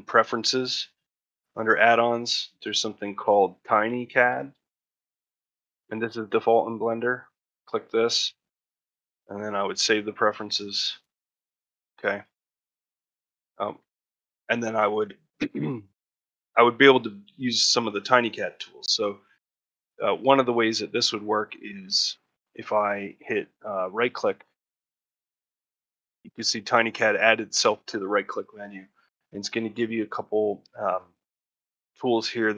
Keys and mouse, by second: 11.6 shift+middle click, 11.9 middle click, 12.2 shift+middle click, 12.5 ctrl+middle click, 12.9 Tab, 13.5 Tab, 14.9 shift+middle click.